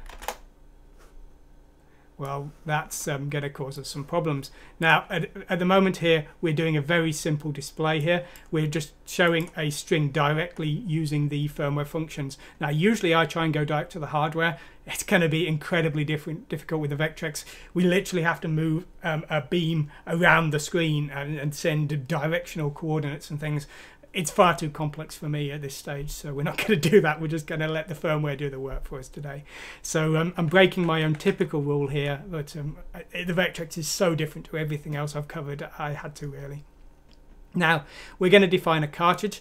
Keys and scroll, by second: 0.0-0.7 typing, 30.6 ctrl+z, 31.0 ctrl+z.